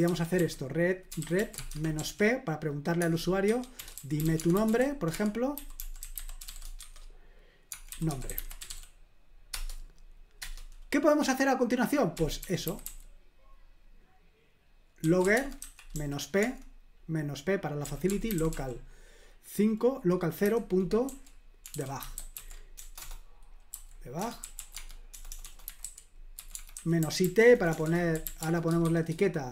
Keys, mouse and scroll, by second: 0.0-9.2 typing, 9.5 Return, 10.4 Return, 11.9-13.3 typing, 14.8-16.4 typing, 17.6-19.0 typing, 20.4-28.8 typing.